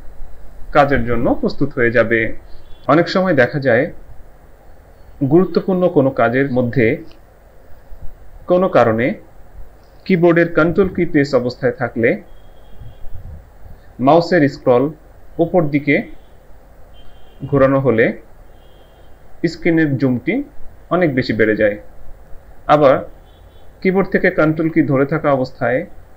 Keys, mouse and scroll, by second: 15.2 ctrl+scroll up 1, 17.5 ctrl+scroll up 1.